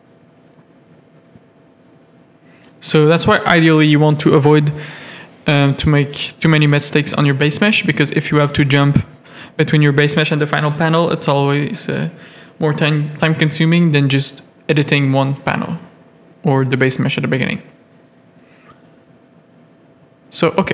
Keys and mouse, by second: 1.1 click, 5.4 click, 6.2 click, 6.4 click, 6.9 Tab, 7.1 middle click, 8.0 3, 10.4 middle click, 12.3 ctrl+click, 12.5 x, 13.2 1, 13.3 middle click, 13.9 Tab, 14.6 alt+a, 14.9 middle click, 15.2 Tab, 15.4 middle click, 16.0 z, 16.2 a, 16.7 shift+middle click, 16.9 middle click, 17.6 click, 17.9 x, 18.6 a, 18.9 middle click.